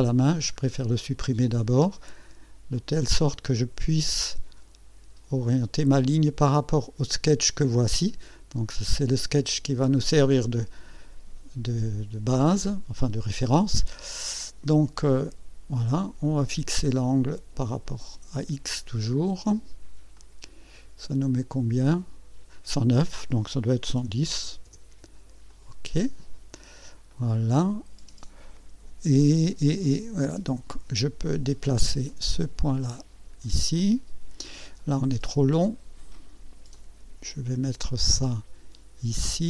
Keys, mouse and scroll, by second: 0.5 scroll down 1, 2.7-6.0 drag, 10.6-11.3 right drag, 16.2 click, 17.8 click, 20.1 click, 21.9 click, 23.7 KP_1, 24.6 KP_0, 25.5 click, 26.5 scroll up 1, 27.1 right click, 29.8 right click, 32.1-33.6 drag, 33.8 right click, 36.7-39.2 drag.